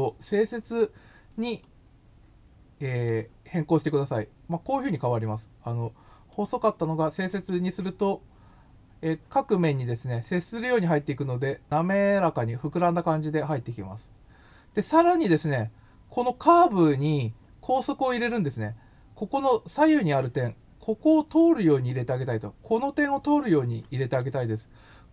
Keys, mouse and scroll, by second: 1.5-3.0 middle drag, 3.7 click, 4.8 click, 6.2 click, 7.2 click, 24.2-25.1 middle drag.